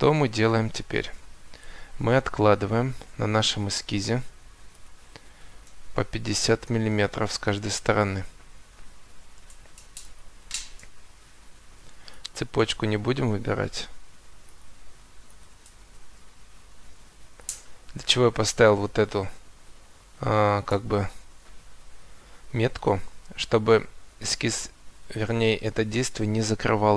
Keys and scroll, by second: 6.3 5, 7.5 Return.